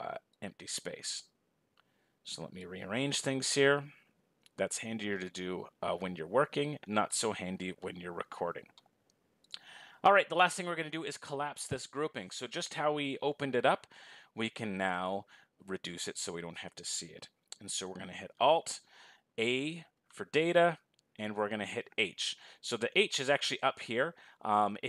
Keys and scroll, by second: 18.7 alt+h.